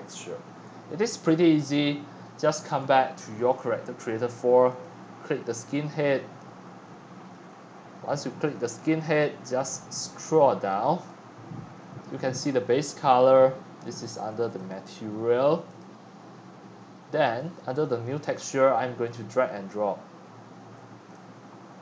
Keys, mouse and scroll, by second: 2.8-3.3 scroll down 6, 3.3-4.0 scroll up 4, 4.8-5.7 drag, 5.7 scroll down 2, 5.8 right click, 5.9-7.4 middle drag, 7.4 right click, 7.7-8.5 scroll down 10, 8.5-12.6 drag, 14.2 click, 14.4 click, 14.6 click, 15.8-21.8 drag.